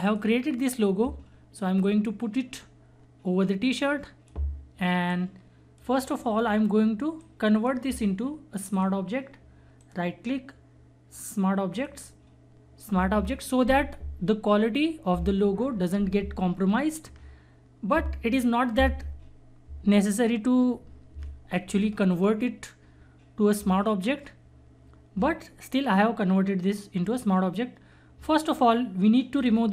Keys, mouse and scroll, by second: 0.0-6.4 drag, 6.4 scroll down 1, 7.2-8.7 drag, 9.8 right click, 11.7 click, 29.3 click.